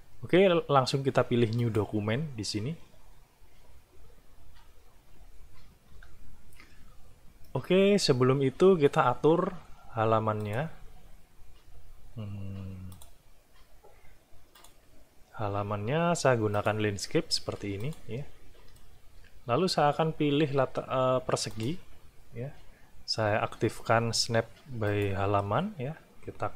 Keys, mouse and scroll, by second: 1.6 click, 5.9 F12, 7.5-9.1 middle drag, 10.4 click, 12.9 click, 14.5 click, 16.5 click, 17.8 click, 18.8-20.1 drag, 21.5 click, 24.9 click.